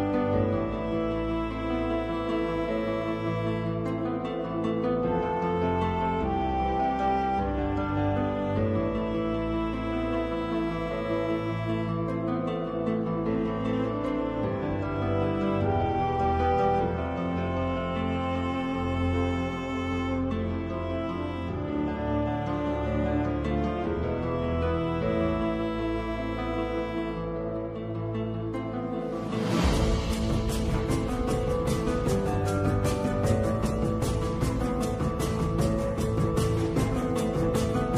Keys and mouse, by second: 8.3 shift+r, 11.5 i, 16.5 i, 21.2 i, 26.2 shift+middle click, 27.8 ctrl+r, 31.5 ctrl+b.